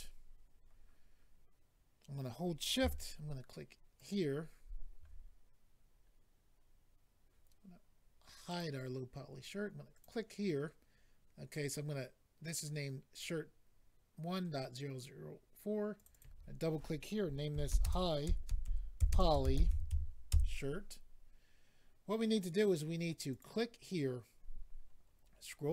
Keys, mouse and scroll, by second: 3.9 shift+click, 5.8-7.1 scroll up 4, 8.4 click, 8.6 click, 9.9 click, 10.0 click, 15.9 click, 16.0 click, 16.1 click, 16.2 click, 17.5-19.9 typing, 20.3 Return, 23.3 click, 24.3-25.0 scroll down 4.